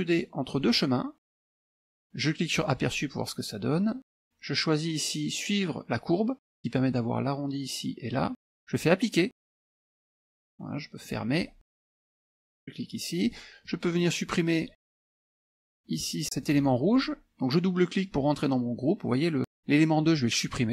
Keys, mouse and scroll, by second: 0.6 click, 1.4 click, 2.6 click, 4.2 click, 9.6 click, 11.1 click, 13.3 click, 13.7-15.1 drag, 15.3 ctrl+z, 16.5 click.